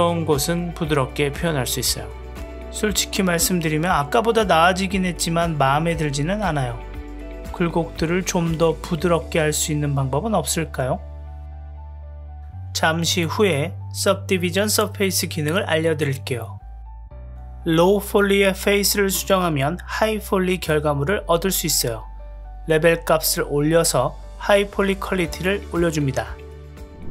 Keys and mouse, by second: 2.4-4.4 middle drag, 5.4-6.2 shift+middle drag, 8.6 click, 10.6-14.9 drag, 17.3 click, 18.5 g, 19.1 click, 19.2 g, 19.6 middle click, 20.4 g, 20.7 middle click, 21.1 g, 21.5 middle click, 21.8 click, 21.9 g, 22.3 middle click, 23.0 middle click, 23.4 g, 23.7 middle click, 24.7-25.6 drag, 25.8 Tab, 26.0-27.0 middle drag.